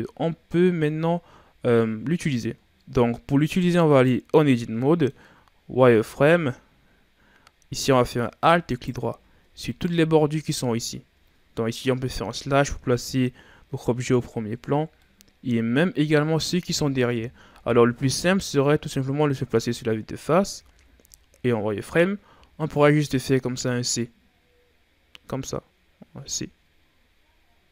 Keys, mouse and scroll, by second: 0.3-0.7 ctrl+scroll up 2, 0.7-1.2 shift+scroll down 4, 1.3-3.7 scroll up 10, 3.8 right click, 4.5 scroll down 2, 4.7 middle click, 5.1-5.6 scroll up 2, 5.6 Tab, 6.2-7.8 scroll up 3, 7.8 middle click, 8.6 alt+right click, 9.6 alt+shift+right click, 12.0 KP_Divide, 13.4-13.8 shift+scroll down 2, 13.8-14.9 scroll up 11, 14.9-17.3 middle drag, 17.3 KP_1, 18.3-19.1 ctrl+scroll up 2, 19.1-19.9 shift+scroll up 6, 20.4 z, 20.9-22.2 scroll up 2, 22.2 c.